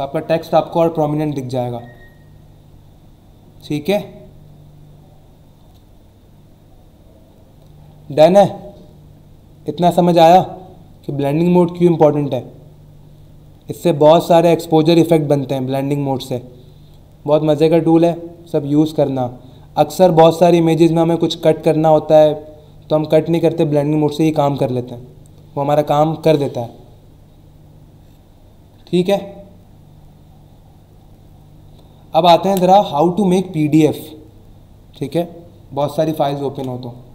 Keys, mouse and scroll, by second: 36.5 ctrl+w.